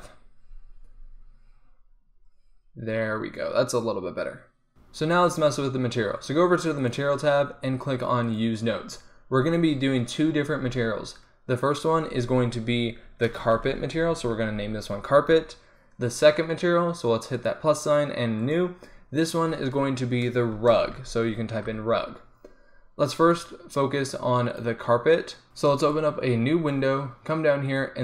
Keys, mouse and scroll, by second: 6.8-9.9 drag.